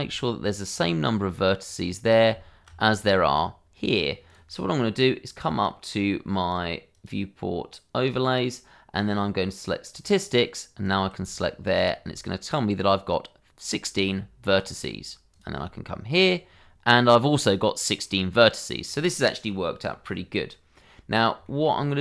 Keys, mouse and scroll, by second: 0.5 ctrl+click, 2.0 click, 3.0 ctrl+click, 4.2 click, 9.9 click, 11.6 ctrl+click, 15.3 click, 16.2 ctrl+click, 18.0 middle click, 21.4 shift+middle click.